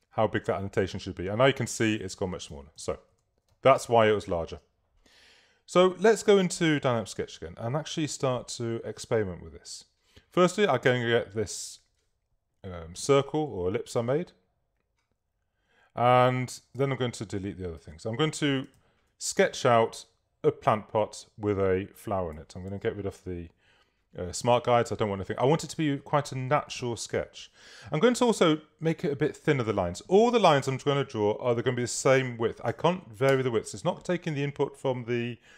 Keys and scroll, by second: 2.1 super+z, 3.9 super+space, 4.5 space, 8.1 v, 16.8 BackSpace, 18.9 super+-, 22.7 super+u, 32.7 3, 33.3 Page_Up.